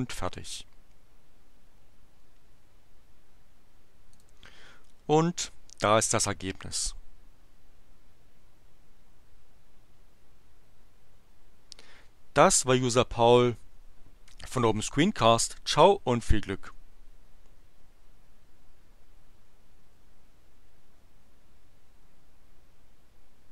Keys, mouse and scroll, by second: 4.2 click, 6.0 click.